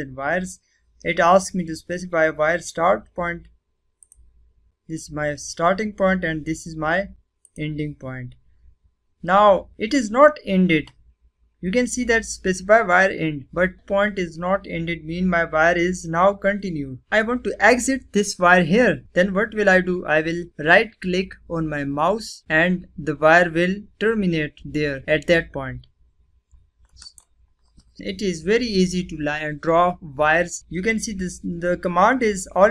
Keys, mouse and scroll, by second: 3.9 click, 7.4 click, 27.0 right click.